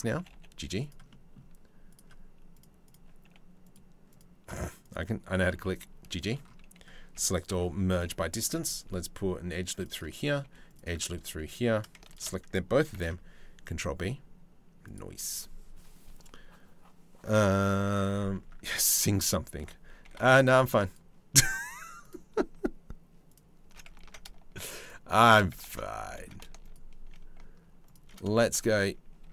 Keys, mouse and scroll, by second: 0.7 click, 3.2 click, 3.7 click, 4.4 click, 4.9 g, 6.8 a, 7.1 m, 8.0 ctrl+r, 10.0 ctrl+r, 12.6 ctrl+b, 19.2 3, 21.6 alt+shift+click, 23.7 ctrl+z, 24.4 alt+shift+click, 25.8 ctrl+z, 26.2 alt+shift+click, 28.8 e.